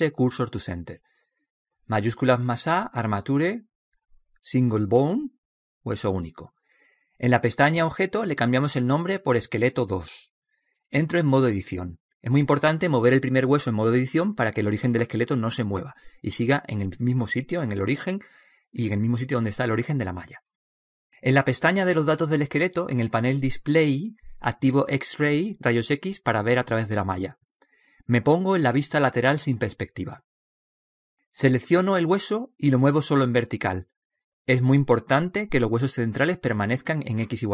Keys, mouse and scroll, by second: 2.3 shift+a, 10.2-13.2 drag, 16.0 click, 18.8 right click, 24.7-28.2 drag, 30.3 KP_3, 32.5 right click, 33.4 middle click, 34.3 click.